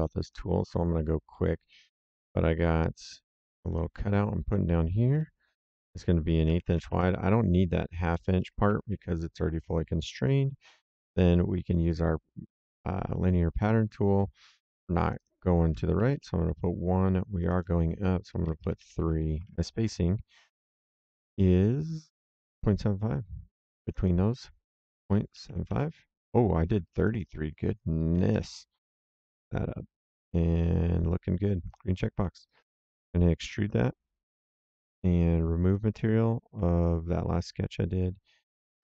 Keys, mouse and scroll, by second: 0.2 click, 1.3 middle click, 1.6 s, 2.7 click, 5.1 click, 6.4 KP_1, 6.6 KP_2, 6.7 KP_5, 6.8 Return, 8.6 Escape, 9.7 click, 10.6 middle click, 12.6 click, 13.6 click, 15.0 click, 15.9 KP_1, 16.1 Return, 17.3 click, 18.4 KP_3, 18.7 Return, 19.4 alt+Tab, 22.4 alt+Tab, 23.8 click, 25.0 KP_Decimal, 25.3 KP_7, 25.4 KP_5, 25.6 Return, 26.9 click, 28.1 KP_3, 28.3 Return, 31.6 click, 32.4 right click, 32.9 s, 33.6 click, 35.6 click, 37.0 click.